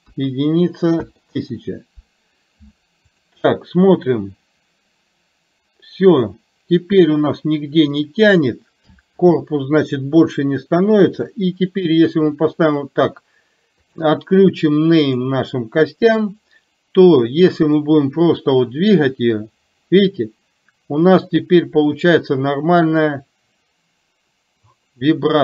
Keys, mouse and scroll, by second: 3.2 click, 4.1-8.2 drag, 11.2-12.7 middle drag, 13.9 click, 15.2 click, 17.8-25.4 drag.